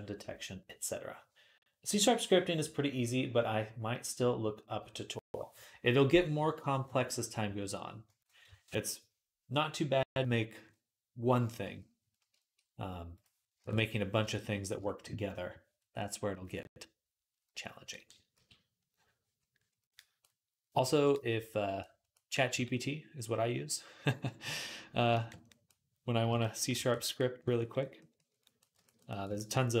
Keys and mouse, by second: 13.4 ctrl+Tab, 18.2 x, 18.6-29.8 drag, 22.3 v, 26.1 j, 28.4 right click.